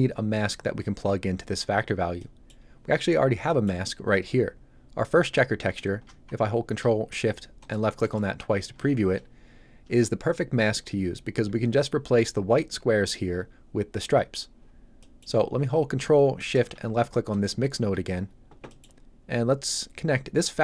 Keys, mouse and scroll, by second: 2.1 middle click, 7.5 ctrl+shift+click, 14.9 middle click, 17.2 ctrl+shift+click, 18.6 shift+click, 20.4 click.